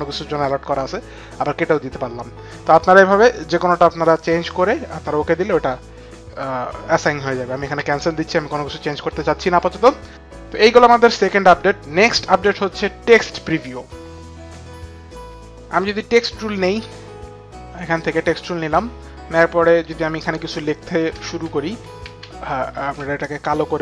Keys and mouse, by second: 0.5 click, 7.6 click, 14.8 click, 19.8 click, 20.0-22.6 typing, 23.1 click.